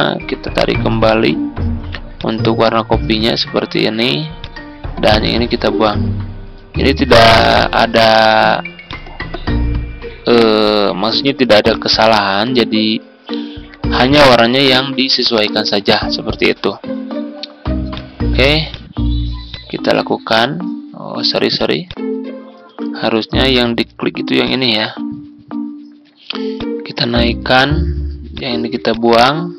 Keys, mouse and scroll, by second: 23.4 Delete, 24.3-29.5 drag.